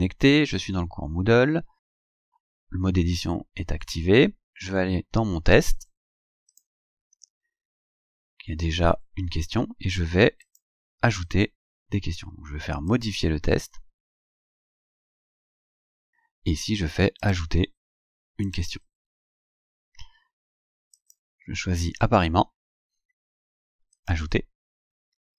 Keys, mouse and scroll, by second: 4.2-5.7 scroll down 8, 6.6 click, 10.5 click, 12.9 click, 15.9 scroll down 2, 17.3 click, 18.5 click, 21.0 click, 24.0 click.